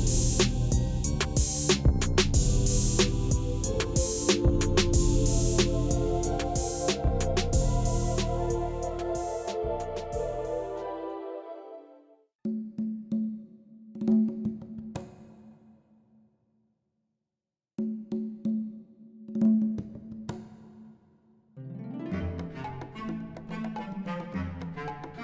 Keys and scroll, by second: 0.0 2, 0.1 ., 0.3 5, 1.0 Escape, 1.5-2.3 typing, 2.8 Return, 2.9 Tab, 3.7 g, 4.0 x, 10.5 r, 10.7 x, 10.9 9, 11.1 Return, 17.2 Tab, 17.8-20.5 typing, 19.5 Return, 20.9 Return, 21.1 Tab, 23.3 g, 23.6 x.